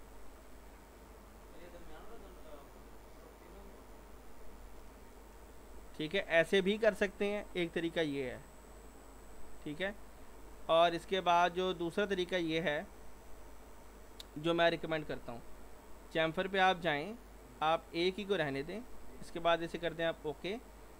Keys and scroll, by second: 5.1 ctrl+z, 12.2 ctrl+z, 12.6 ctrl+z, 12.9 ctrl+z, 13.2 ctrl+z.